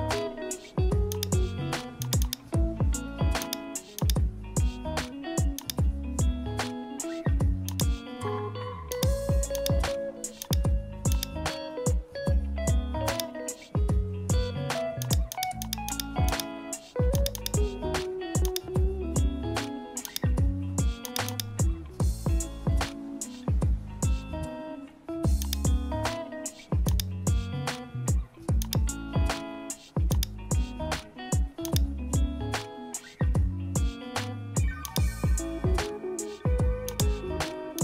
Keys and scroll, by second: 18.9 super+-, 22.2 super+-.